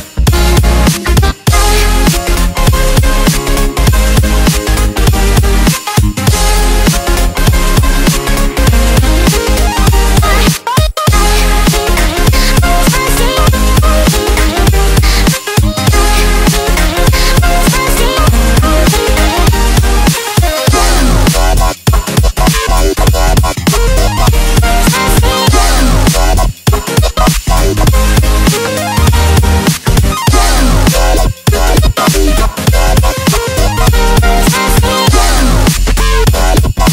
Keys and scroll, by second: 2.9 space, 3.4 space, 3.7 Tab, 5.9 Tab, 18.1 Tab, 18.5 space, 18.9 Tab, 19.0 alt+super+space, 19.1 alt+super+space, 19.2-19.6 alt+super+space, 19.3 Tab, 19.9 alt+space, 20.4-21.9 alt+super+space, 22.6 super+space, 23.1 alt+super+space, 23.6-24.3 typing, 24.0 alt+super+space, 24.3 alt+super+space, 24.4 alt+super+space, 24.5 alt+super+space, 25.2 super+space, 27.3 super+c, 27.9-28.5 typing, 28.6 super+space, 28.7 super+space, 28.9 super+space, 29.0 super+space, 29.1 super+space, 29.2 super+space, 30.7 Delete, 31.0-31.3 typing, 31.8 super+space, 31.9 super+space, 32.0 super+space, 32.1 super+space, 32.2 super+space, 32.3 super+space, 33.4 super+space, 33.9 super+space, 34.0 super+v, 35.7 space, 36.2 alt+super+space, 36.3 alt+super+space, 36.6 alt+super+space, 36.7 alt+super+space.